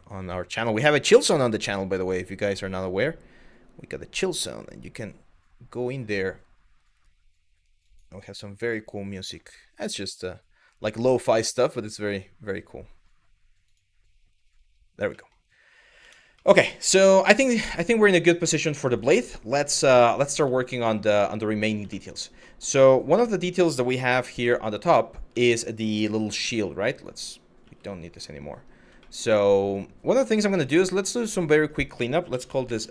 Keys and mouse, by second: 14.9 middle click, 15.6 Tab, 16.1 middle click, 16.6-17.4 middle drag, 18.5 middle click, 19.1-19.5 middle drag, 20.4 shift+middle drag, 20.9 middle click, 21.6 shift+middle drag, 22.1 middle click, 22.8 KP_1, 24.2 shift+middle click, 25.1 middle click, 27.3 g, 27.7 click, 28.6 middle drag, 31.1 click, 31.2-32.9 drag, 32.8 BackSpace.